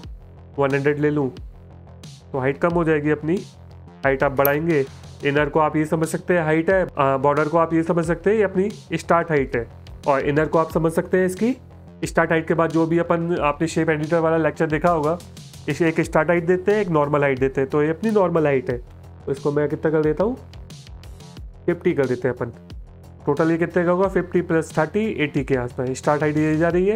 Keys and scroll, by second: 0.0-0.7 typing, 4.5 BackSpace, 4.7 BackSpace, 4.9 BackSpace, 21.7 KP_5, 21.8 KP_0.